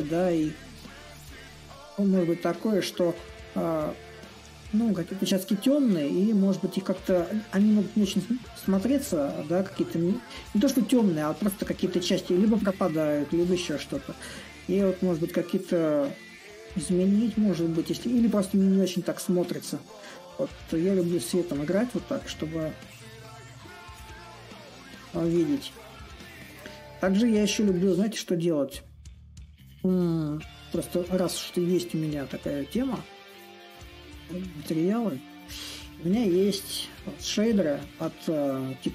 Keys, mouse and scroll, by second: 1.1-6.1 drag, 6.5-11.5 drag, 13.9-18.9 drag, 21.1-26.2 drag, 27.3-32.4 drag, 33.9 click.